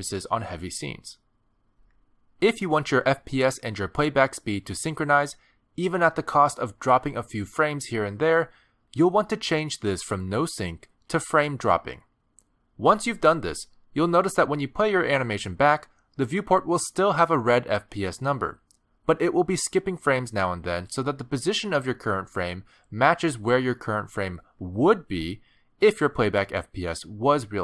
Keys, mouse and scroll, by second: 22.2 click, 24.8 click.